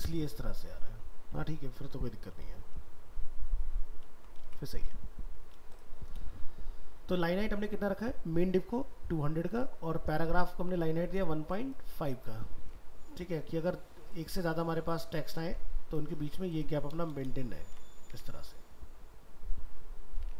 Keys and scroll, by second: 2.0 ctrl+z, 4.4 alt+Tab, 12.6 alt+Tab, 16.2 ctrl+c, 18.1 alt+Tab.